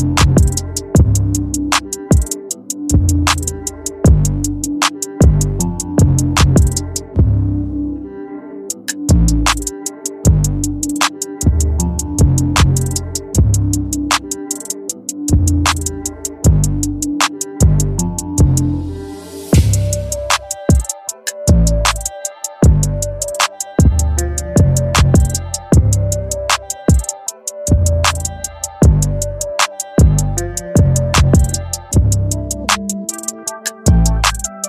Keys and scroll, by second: 16.4 ctrl+t, 20.3 Return.